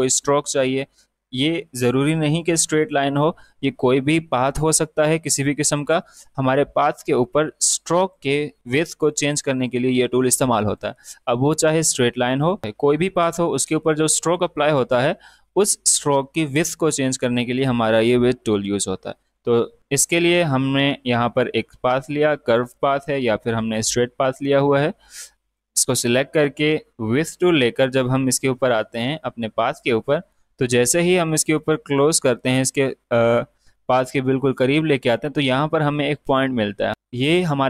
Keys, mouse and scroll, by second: 7.9 click, 15.5 click, 20.6 space, 20.7 click, 23.5 space, 23.7 click, 24.0 space, 25.0 click, 25.3 space, 25.6 space, 27.1 click, 28.3 alt+scroll up 1.